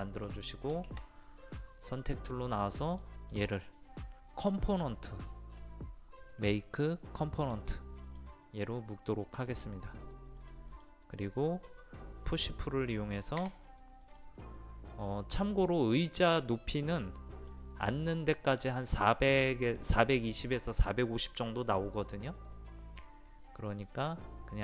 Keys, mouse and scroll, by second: 2.9 click, 6.3-7.4 right drag, 8.1-13.4 drag, 13.4 p, 14.0 click, 15.8-18.4 middle drag.